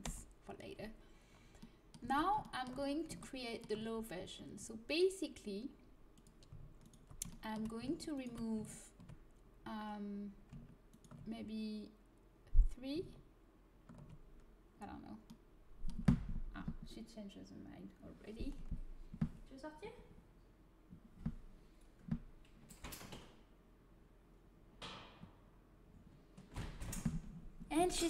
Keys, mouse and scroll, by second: 0.0 Return, 1.9 Tab, 6.0 click, 6.7-9.9 right drag, 7.2-9.9 drag, 10.8-14.2 right drag, 14.2-15.9 middle drag.